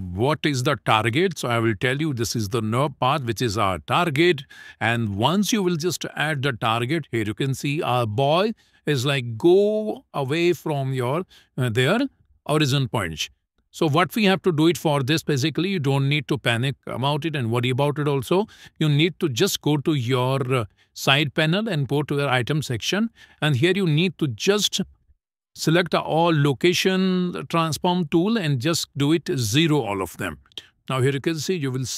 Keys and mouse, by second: 0.3-4.0 drag, 15.7 middle click, 18.3 shift+middle click, 20.4 n, 22.2 click, 24.2-29.3 drag, 31.5 click.